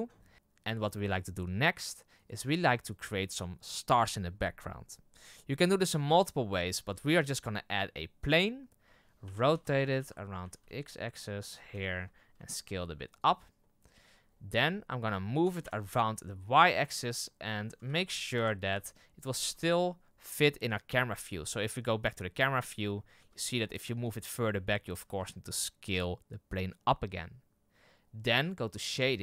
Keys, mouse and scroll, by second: 2.2 right click, 8.4 shift+a, 9.3 r, 12.3 s, 13.5 middle drag, 13.8-14.2 scroll down 4, 14.2-14.8 scroll up 9, 15.5 g, 17.7 g, 19.5 right click, 20.8 KP_0, 23.2 s, 25.1 s, 28.9 click.